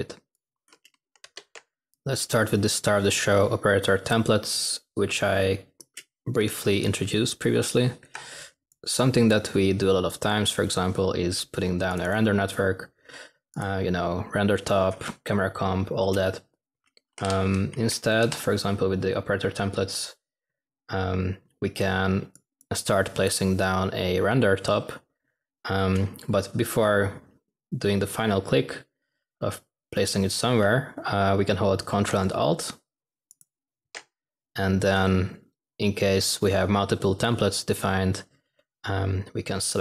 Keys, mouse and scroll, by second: 16.8-17.7 typing, 35.3 typing.